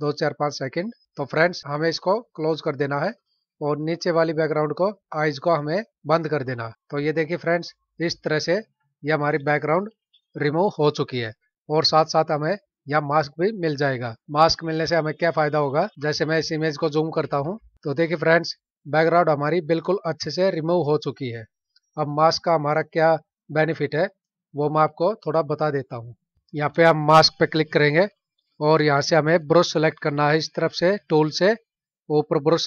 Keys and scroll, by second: 16.4 ctrl+=, 17.8 space.